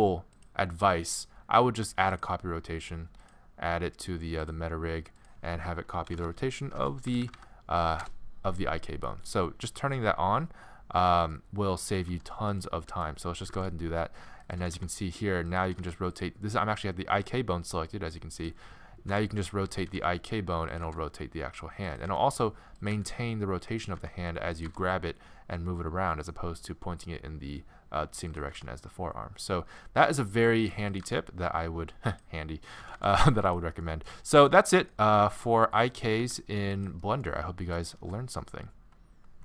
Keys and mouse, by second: 0.3-3.1 drag, 7.2 Down, 7.3 Down, 12.1 g, 13.5-14.8 drag, 13.5 g, 14.6 r, 15.6 r, 18.1 click, 19.1 g, 19.9 g, 20.3 r, 20.8 g, 22.3 r, 23.0 g, 24.1 r, 24.7 g, 28.6 r, 31.0 g, 32.8 r, 33.7 middle click, 35.4 r, 36.1 r, 37.8 middle click.